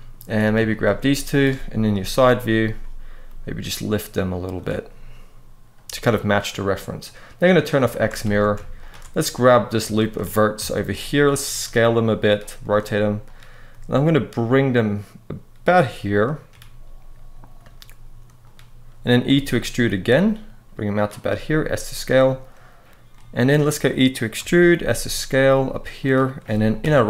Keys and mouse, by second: 0.4 shift+click, 0.7 middle click, 1.7 KP_3, 3.0 g, 4.3 click, 7.3 click, 7.6 shift+middle click, 8.0 alt+a, 8.5 alt+shift+click, 9.6 shift+middle click, 10.4 shift+middle click, 11.2 s, 11.9 click, 12.3 r, 13.0 click, 13.4 g, 15.4 click, 15.9 shift+middle click, 17.3 r, 18.2 click, 19.0 e, 20.7 click, 21.0 s, 21.6 click, 22.9 middle click, 24.5 e, 24.5 s, 25.7 click, 26.5 KP_3.